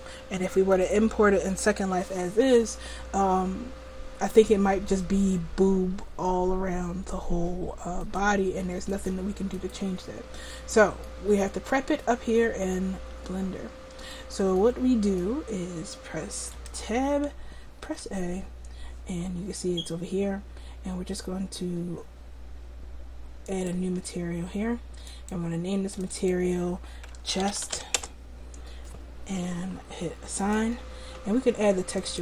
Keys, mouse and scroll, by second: 4.8-6.4 middle drag, 8.1-11.1 drag, 16.6 Tab, 17.9 a, 23.6-28.0 drag, 28.0 \, 30.4-32.2 drag.